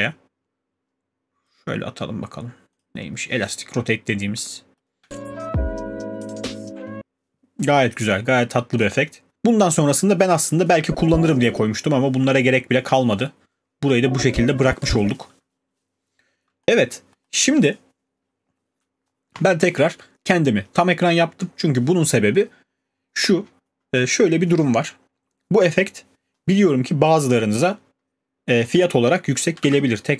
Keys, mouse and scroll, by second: 1.4 click, 8.8 click, 15.5-16.9 alt+scroll, 16.9 click, 17.2-18.2 scroll.